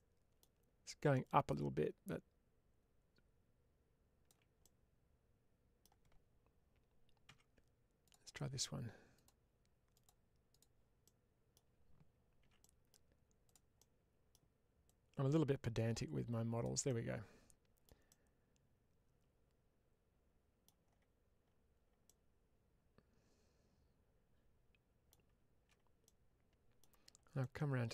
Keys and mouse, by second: 1.1-4.2 drag, 4.5-5.7 middle drag, 7.2 2, 7.9 click, 9.0-10.7 drag, 10.9 middle click, 12.3 1, 12.5 middle click, 13.3 click, 13.6 middle click, 14.8-16.5 drag, 16.8-20.5 middle drag, 21.9-25.0 middle drag, 25.9 middle click, 27.3-27.9 middle drag.